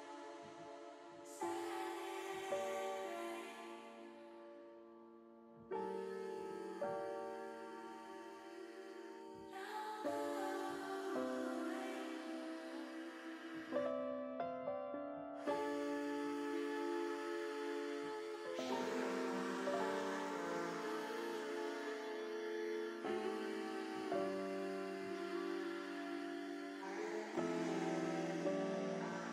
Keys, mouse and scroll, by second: 5.9 click, 6.5 middle click, 7.7 middle click, 9.0 ctrl+z, 9.4 middle click, 11.3 shift+middle click, 12.1 middle click, 13.3 KP_1, 17.6 shift+middle click, 18.9 e, 22.2 s, 23.8 click.